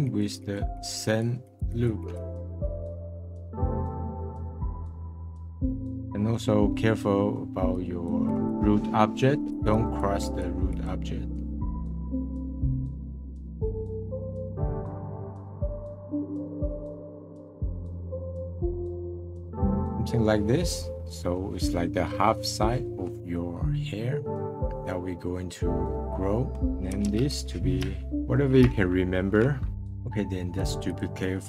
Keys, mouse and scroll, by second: 2.4 middle click, 2.5 click, 2.8 middle click, 2.9 click, 3.2 middle click, 3.4 click, 4.2 middle click, 4.4 click, 4.9 middle click, 5.1 click, 5.4 middle click, 5.7 click, 7.7-11.1 drag, 11.1 middle click, 11.7 click, 11.8 middle click, 12.0 click, 12.2 middle click, 12.4 click, 12.6 middle click, 12.7 click, 12.9 middle click, 13.2 middle click, 13.4 click, 13.6 middle click, 13.7 click, 14.1 middle click, 14.2 click, 14.3 middle click, 15.0 middle click, 15.1-16.3 drag, 16.3 middle click, 16.4 click, 16.5 middle click, 16.8 click, 17.0 middle click, 17.3 click, 17.4 middle click, 17.5 shift+click, 17.8 middle click, 17.9 shift+click, 18.1 middle click, 18.5 shift+click, 18.8 middle click, 19.0 shift+click, 19.5-25.6 middle drag, 26.6-29.7 drag, 30.9 click.